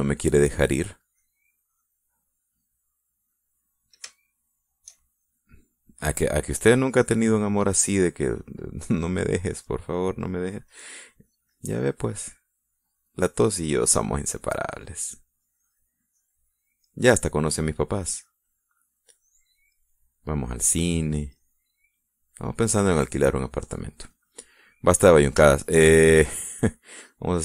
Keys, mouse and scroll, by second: 0.8 click, 2.3 click, 5.4 shift+middle click, 9.3 middle click, 11.0 middle click, 11.7-13.8 drag, 15.7-17.2 drag, 17.3 click, 18.1 middle click, 19.4-21.0 drag, 21.0 middle click, 21.9 click, 22.6-23.8 middle drag, 24.1-25.5 drag, 25.6-27.1 middle drag.